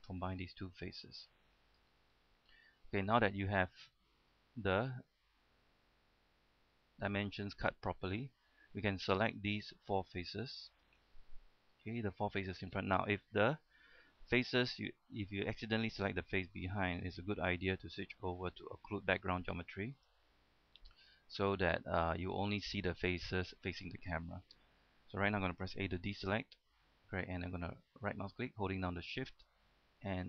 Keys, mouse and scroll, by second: 0.2 f, 0.6-0.9 scroll down 1, 0.9 middle click, 2.0 shift+middle click, 2.8 shift+middle click, 3.1-3.4 scroll up 1, 3.4 middle click, 5.4-6.9 middle drag, 7.0 shift+middle click, 8.1-8.9 scroll down 1, 9.2 right click, 9.7 shift+right click, 10.3 shift+right click, 12.0 middle click, 12.4-13.0 scroll up 1, 13.0 middle click, 13.4-14.3 scroll up 2, 14.3-16.9 middle drag, 17.0 shift+middle click, 20.2 click, 21.1 scroll up 1, 21.2 scroll down 1, 21.4-27.7 middle drag, 26.2 a, 28.1 right click, 28.9 shift+right click, 29.6 shift+right click, 30.1 shift+right click.